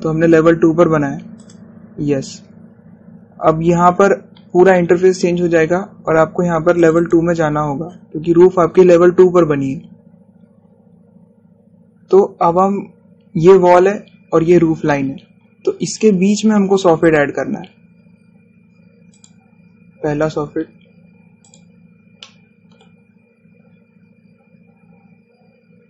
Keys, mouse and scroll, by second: 2.4 click, 7.9 click, 9.4 scroll up 1, 17.0 click, 20.2 click, 22.5 click, 23.3 middle click, 24.2-24.7 scroll down 1.